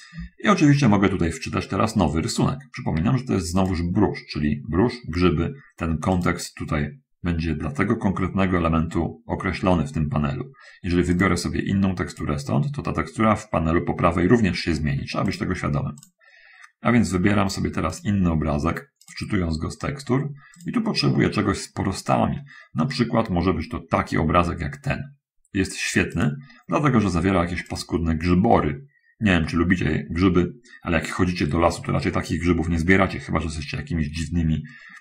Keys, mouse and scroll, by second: 3.9 click, 6.0 click, 11.4 click, 12.1 click, 15.5 click, 16.3 click, 19.3 click, 20.9 click, 26.5 click, 27.9 click.